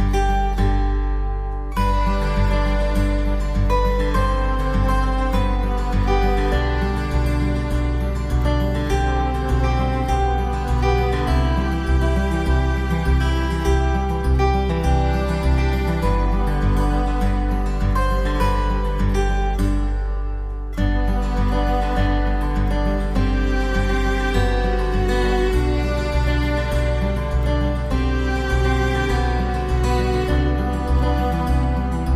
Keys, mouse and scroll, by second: 0.3 Down, 0.3 click, 0.5 scroll down 1, 1.0 click, 1.8 shift+click, 2.0 shift+click, 2.1 middle click, 2.1 scroll down 1, 2.5 ctrl+click, 2.6 shift+double click, 3.5 shift+double click, 4.0 alt+middle click, 4.1 alt+w, 4.5 alt+middle click, 4.8 click, 5.2 click, 5.6 click, 5.8 click, 5.9 click, 6.0 click, 6.0 double click, 6.2 double click, 6.4 alt+w, 6.8 F3, 7.0 middle click, 7.0-7.4 scroll up 1, 7.4 click, 7.5 double click, 7.9 click, 8.0 alt+w, 8.0 alt+middle click, 8.7 click, 8.9 alt+middle click, 9.0 alt+middle click, 9.2 click, 9.6 click, 9.9 click, 10.0 click, 10.1 click, 10.1 ctrl+click, 10.7 alt+middle click, 10.9 click, 11.0 double click, 12.4 alt+middle click, 12.5 alt+middle click, 12.7 F4, 13.0 alt+middle click, 13.5 alt+middle click, 13.8 click, 14.1 F4, 14.4 alt+w, 14.7 middle click, 14.7 scroll down 1, 14.9 middle click, 15.3 click, 15.6 click, 16.1 click, 16.4 Delete, 17.0 click, 17.1 Delete, 17.7 click, 17.8 Delete, 18.4 click, 18.4 Delete, 18.6 scroll up 1, 18.9 middle click, 18.9 click, 19.0 click, 19.2 click, 19.6 scroll down 1, 19.8 Delete, 20.1 click, 20.2 alt+w, 20.5 alt+middle click, 20.6 alt+middle click, 20.7 alt+w, 21.0 scroll down 1, 21.2 middle click, 21.4 click, 21.5 double right click, 21.8 click, 21.9 click, 22.2 click, 22.6 middle click, 23.1 shift+click, 23.4 shift+click, 23.9 shift+click, 24.9 middle click, 24.9 -, 25.1 click, 25.2 click, 25.4 scroll down 1, 25.7 middle click, 25.8 middle click, 25.9 scroll up 1, 26.3 click, 26.6 scroll up 1, 27.1 click, 27.3 click, 27.8 click, 28.2 click, 28.7 Down, 28.8 middle click, 28.8 scroll up 1, 29.0 click, 29.1 Down, 29.4 click, 29.6 middle click, 29.6 scroll up 1, 29.9 click, 30.0 ctrl+z, 30.1 click, 30.3 click, 30.4 Down, 30.5 scroll up 1, 30.6 middle click, 30.6 scroll down 1, 30.7 middle click, 32.0 click.